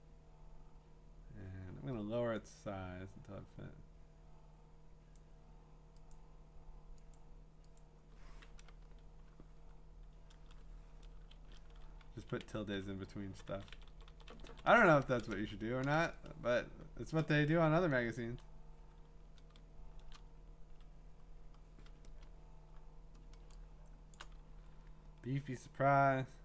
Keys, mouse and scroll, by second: 5.1 click, 6.1 click, 7.1 click, 7.8 click, 8.8 Return, 11.2 Up, 11.3 ~, 12.2 Down, 12.4 Down, 13.2 Up, 13.5 Up, 13.7 Up, 13.9 Up, 14.1 Up, 14.3 Right, 14.5 Right, 14.7 Right, 15.4 Left, 15.8 Return, 19.5-20.1 ctrl+space, 22.1 Return, 22.8-23.2 scroll, 24.1 click, 24.5-25.5 scroll, 26.0 middle click, 26.1 middle click.